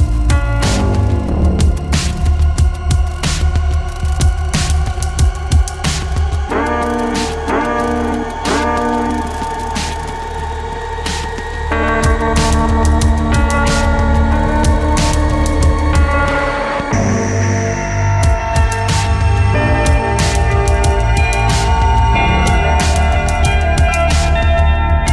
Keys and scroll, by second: 8.5 ctrl+d, 10.3 ctrl+d, 23.4 space.